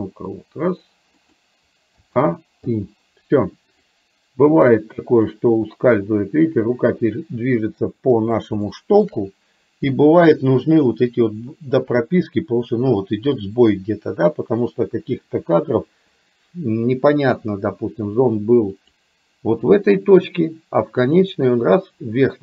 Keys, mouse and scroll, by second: 2.0 a, 2.8 i, 3.9 click, 5.4-8.3 drag, 8.8 shift+middle click, 11.3-17.5 drag, 18.9 click, 21.2 click.